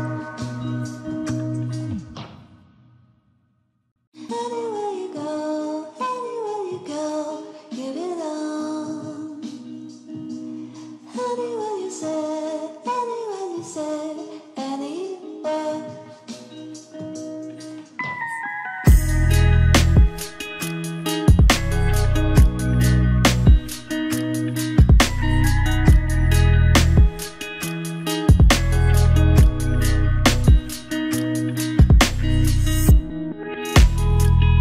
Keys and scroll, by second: 11.8 ctrl+=.